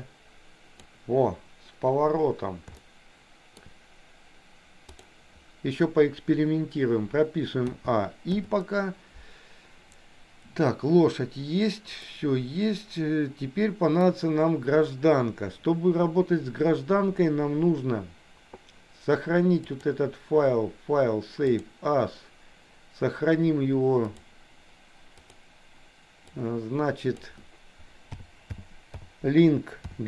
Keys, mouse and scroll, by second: 2.7 shift+middle click, 7.7 a, 8.4 i, 12.2-14.0 middle drag, 19.6-21.9 drag.